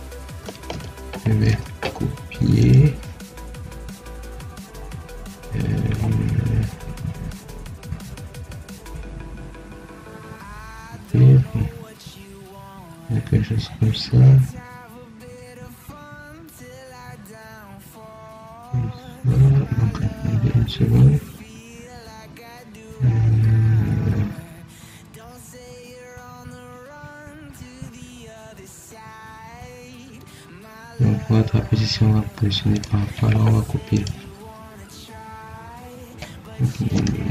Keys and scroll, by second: 19.4 Escape.